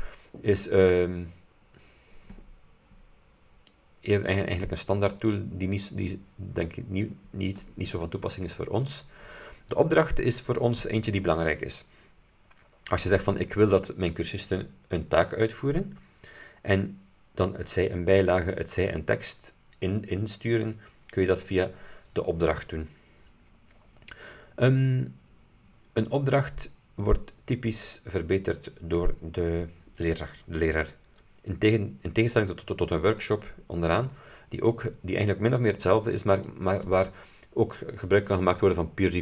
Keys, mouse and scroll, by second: 10.7 click, 33.2 click, 36.4 click.